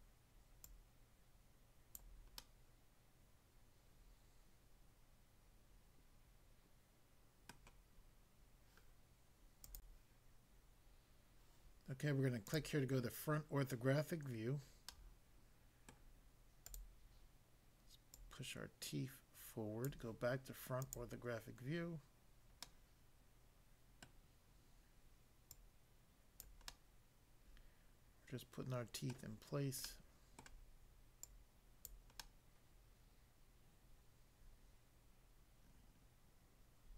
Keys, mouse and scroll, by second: 0.7 click, 2.0 click, 2.4 middle click, 7.6 middle click, 9.6 click, 9.8 click, 12.4 click, 14.9 middle click, 15.9 middle click, 16.7 click, 18.1 click, 19.8 click, 20.8 click, 21.0 click, 22.6 middle click, 24.0 middle click, 25.4 click, 26.4 click, 26.7 middle click, 29.1 middle click, 29.8 middle click, 30.4 middle click, 31.2 click, 31.9 click, 32.2 middle click.